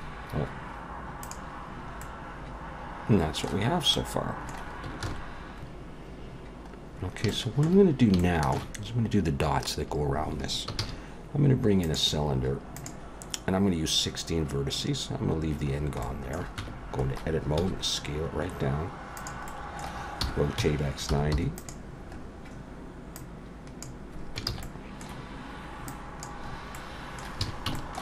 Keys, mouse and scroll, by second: 1.2 click, 1.7-2.6 scroll down 2, 2.0 middle click, 3.7 scroll up 1, 3.9 middle click, 5.1 ctrl+s, 5.7 click, 5.7 x, 5.7 KP_1, 6.9-7.3 scroll up 1, 7.3 shift+middle click, 8.5 shift+middle click, 10.8 shift+a, 15.7-16.0 scroll down 2, 16.0 middle click, 16.6 Tab, 17.6 s, 19.5 middle click, 20.2 r, 22.1-23.2 scroll up 4, 23.2 click, 24.5 ctrl+z, 24.6 middle click, 25.9 click, 26.5-27.4 scroll up 2, 26.7 middle click, 27.4 alt+a.